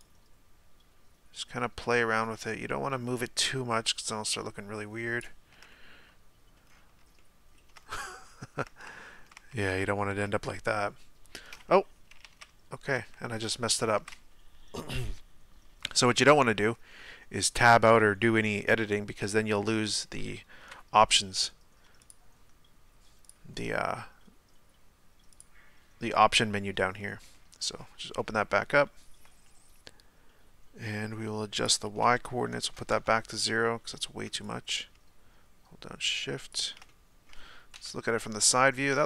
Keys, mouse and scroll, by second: 5.7-6.6 middle drag, 6.6-7.2 scroll down 1, 7.2 scroll down 1, 7.3-7.8 shift+middle drag, 7.8-8.6 scroll down 1, 8.6-9.4 middle drag, 9.4 Tab, 9.8 Tab, 12.3 ctrl+z, 13.0 ctrl+z, 18.9-20.6 middle drag, 20.6 KP_1, 25.4-27.0 drag, 27.0-27.6 middle drag, 27.6 scroll up 2, 28.2-33.0 middle drag, 33.0-36.9 drag, 36.9-37.8 middle drag, 37.8 KP_3.